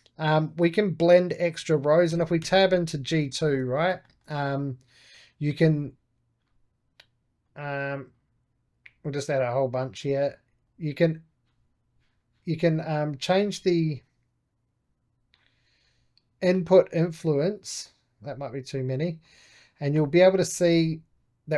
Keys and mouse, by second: 2.0 Tab, 3.3-5.3 shift+middle drag, 5.4-13.0 drag, 13.3-21.5 drag.